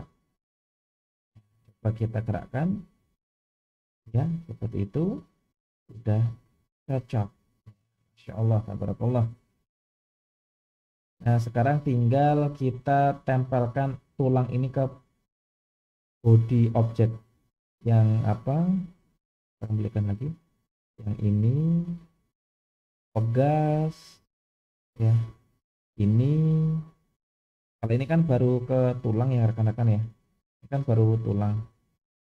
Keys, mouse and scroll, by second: 1.7 click, 2.7 g, 9.9-10.5 scroll up 2, 10.5-12.2 middle drag, 12.8 scroll down 1, 17.1 click, 18.6-19.5 drag, 20.5 click, 22.9 click, 24.3 drag, 25.0-25.9 scroll down 2, 25.9 click, 28.4 click, 29.2-30.0 drag, 31.0 click, 31.3 g.